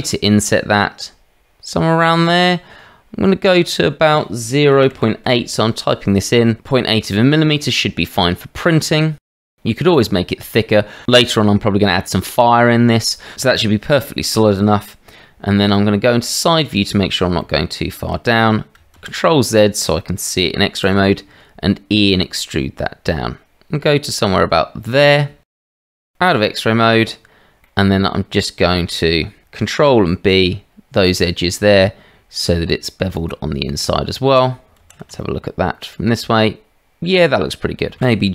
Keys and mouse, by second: 7.8 click, 7.8 right click, 8.9 shift+middle click, 16.7 click, 17.4 shift+middle click, 18.2 shift+middle click, 19.0 shift+z, 20.8 e, 26.0 shift+z, 26.3 click, 27.6 click, 27.9 middle click, 28.4 middle click, 29.1 shift+middle click, 29.8 ctrl+b, 34.8 shift+z, 38.0 g.